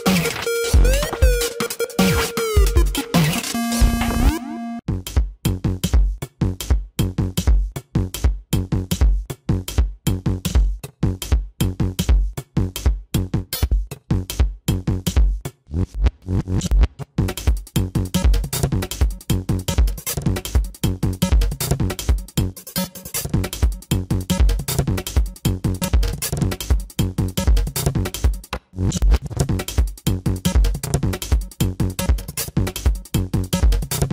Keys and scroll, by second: 1.2 space, 1.7 space, 2.4 space, 5.4 space, 5.8 ctrl+alt+z, 6.3 ctrl+=, 7.3 ctrl+-, 7.5 space, 7.8 ], 8.1 ctrl+alt+z, 8.6 ctrl+alt+z, 9.4 ctrl+-, 9.8 space, 10.0 ctrl+-, 10.2 ], 12.6 ctrl+-, 12.7-15.4 typing, 16.7 space, 19.5 ctrl+=, 21.4 ctrl+=, 22.1 space, 23.3 ctrl+alt+z, 23.7 space, 24.6 ctrl+-, 25.5 space, 28.1 ctrl+=, 28.7 space, 29.7 ctrl+=, 29.9 space, 30.8 ctrl+alt+z.